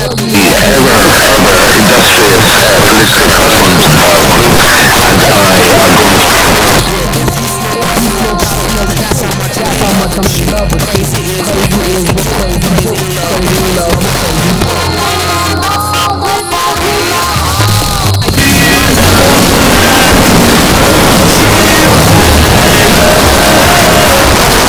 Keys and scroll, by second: 6.2 Page_Down, 24.3 Page_Down.